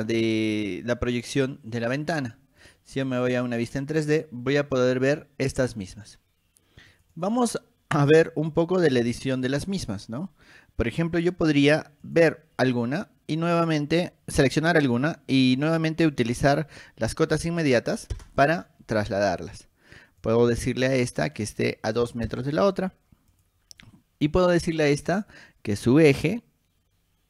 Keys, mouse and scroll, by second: 2.8 click, 4.2-5.9 shift+middle drag, 7.1 click, 7.3 click, 8.5 middle click, 8.5 scroll down 1, 9.1 click, 12.2 click, 16.3 click, 19.2 click, 20.4 click, 21.4 click, 23.5 click, 24.4 click, 25.1 middle click, 26.1-27.2 drag.